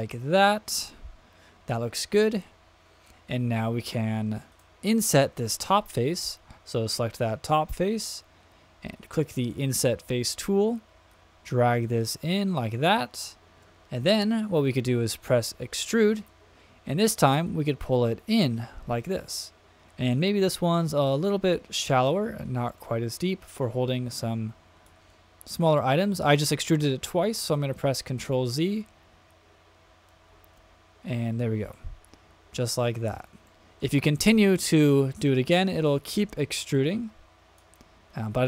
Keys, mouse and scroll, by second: 4.5 click, 9.4 click, 11.1 click, 15.8 click, 17.4-20.7 drag, 21.8 middle click, 22.8 middle click, 23.6 click, 27.4 super+z, 29.1 super+z, 30.3 shift+super+z, 32.8-33.2 middle drag, 33.5 shift+middle click, 34.5-35.5 drag, 35.9 middle click, 36.7-37.6 drag.